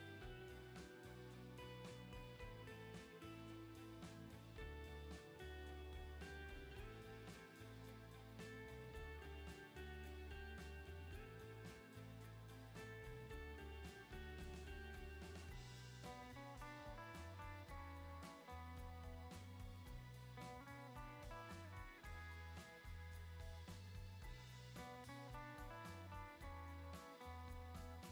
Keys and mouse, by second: 1.3 shift+click, 4.4 shift+click, 4.8-7.2 middle drag, 8.2 /, 9.9 shift+click, 10.3 ctrl+z, 10.9 shift+click, 11.7 /, 26.4 middle click, 27.7-28.1 drag.